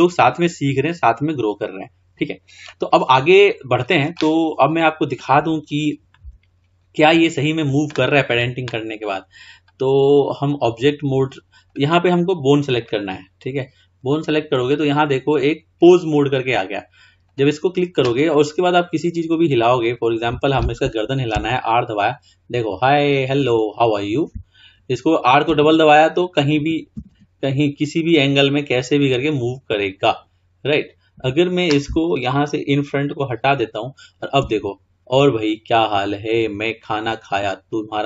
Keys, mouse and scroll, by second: 2.8-4.4 scroll down 4, 4.4-5.3 scroll up 3, 5.3-8.0 middle drag, 9.6-12.1 drag, 12.9 click, 14.7-17.4 drag, 18.4-18.7 scroll down 2, 18.7-19.6 scroll up 5, 19.6-19.9 drag, 21.4 r, 32.4-33.2 scroll down 2, 33.2 click, 34.5 r.